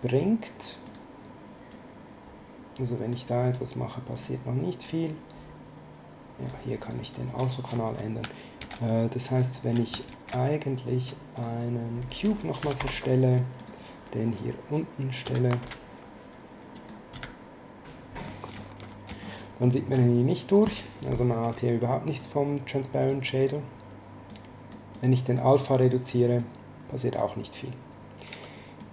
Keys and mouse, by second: 4.1 click, 6.8 click, 8.6 shift+a, 10.1 shift+a, 11.3 click, 12.3-13.3 typing, 13.6 click, 15.2 s, 16.7 click, 17.1 s, 18.2 click, 18.6 middle click, 19.9 click, 20.5 right click, 21.8 click, 23.0 click, 24.3 click, 28.8 click.